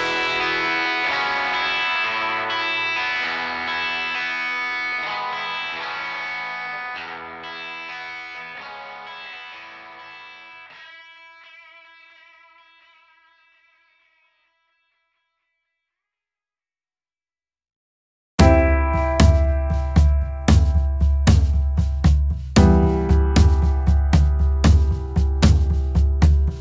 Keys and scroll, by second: 3.9 alt+space, 11.8 ctrl+z.